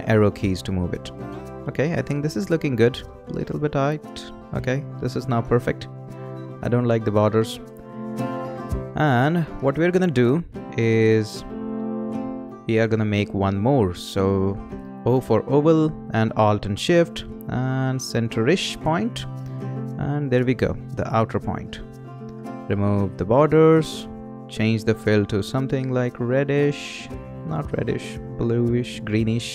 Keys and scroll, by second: 4.4 Left, 4.8 Down, 15.1 o.